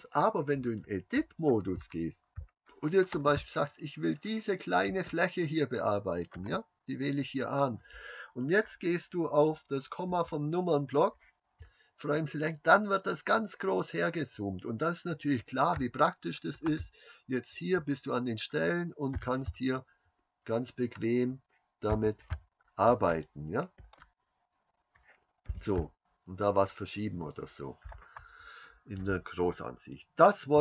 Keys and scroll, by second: 0.6 Tab, 10.2 KP_Decimal, 25.5 g.